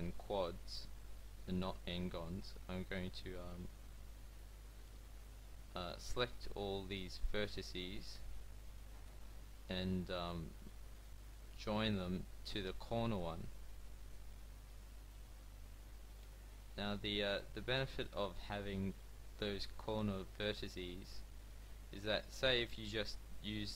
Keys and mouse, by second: 0.7 f, 2.7 f, 4.5 f, 7.6 f, 9.8 f, 12.1 f, 12.7 a, 15.7 f, 17.5 f, 19.4 f, 21.9 f.